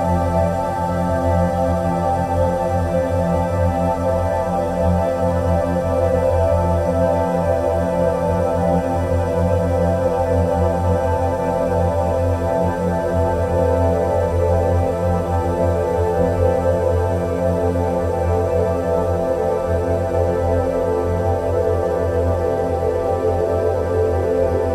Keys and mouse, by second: 5.1-5.5 drag, 8.5 g, 9.8 g, 14.5 Tab, 15.9-18.0 drag, 24.6 click.